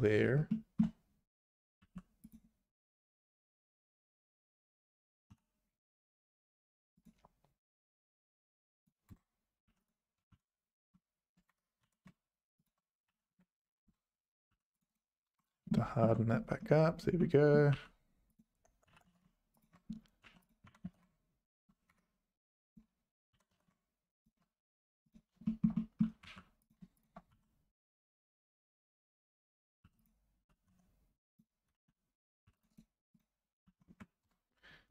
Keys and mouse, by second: 0.5 shift+middle click, 1.8 2, 5.3 k, 9.7 1, 10.2 g, 11.8 g, 13.1 a, 13.3 space, 14.5 2, 14.9 right click, 15.7 shift+middle click, 17.2 middle click, 17.7 2, 18.9 e, 20.2 1, 20.6 g, 22.7 click, 23.3 g, 25.4 shift+middle click, 25.8 middle click, 26.2 2, 27.3 f, 27.9 2, 29.8 2, 30.4 e, 31.7 a, 32.4 2, 32.7 right click, 33.6 a, 33.9 space.